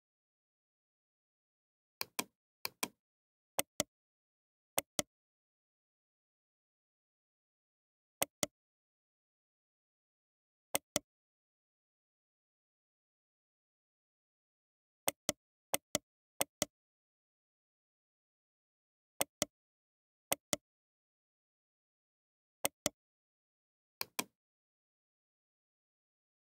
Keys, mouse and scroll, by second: 3.5-4.8 drag, 6.2 ctrl+j, 7.2 g, 9.5-13.6 middle drag, 10.3 g, 13.7 ctrl+z, 14.6 g, 15.7-17.3 right drag, 16.0 g, 17.3-19.5 middle drag, 19.5 Tab, 19.5-21.9 right drag, 20.0 Tab, 21.2 Tab, 24.3-26.5 drag.